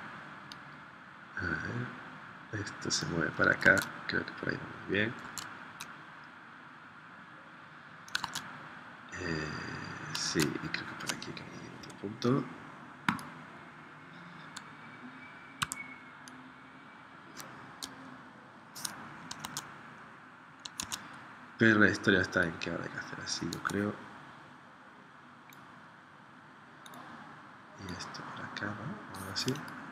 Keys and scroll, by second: 3.7 super+Tab, 5.2 super+Tab, 8.2 super+Tab, 10.4 super+Tab, 11.8 p, 15.8 a, 19.4 super+Tab, 20.7 super+Tab.